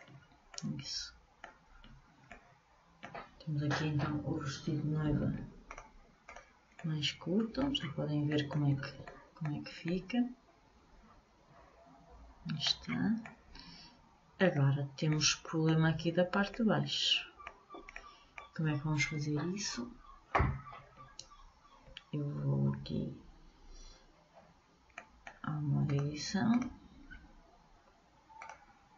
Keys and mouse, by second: 5.8-7.6 drag, 11.3 middle click, 13.0 middle click, 13.6 middle click, 14.0 middle click, 18.4-20.1 middle drag, 25.1 middle click, 26.0-27.5 drag, 28.2 middle click.